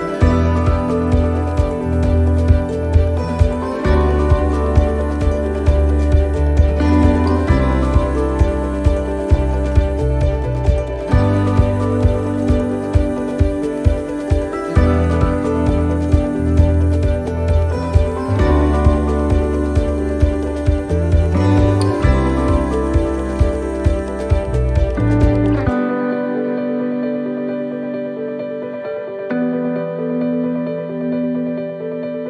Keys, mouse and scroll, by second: 3.4 click, 5.1 click, 5.1 e, 5.5 s, 6.8 middle click, 7.7 middle click, 8.7 middle click, 10.1 middle click, 10.7 shift+middle click, 11.0 shift+middle click, 11.1-11.5 scroll down 2, 11.5 shift+middle click, 12.0-12.3 scroll up 1, 13.0 click, 14.5 click, 17.4 click, 18.6 s, 26.7 middle click, 26.7 r, 29.1 r.